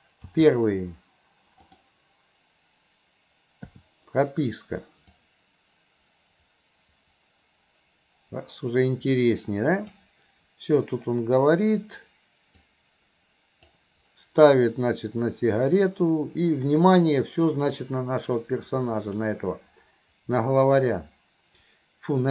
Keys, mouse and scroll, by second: 0.3 g, 5.3-10.1 drag, 12.8-13.8 drag, 17.9-19.3 drag.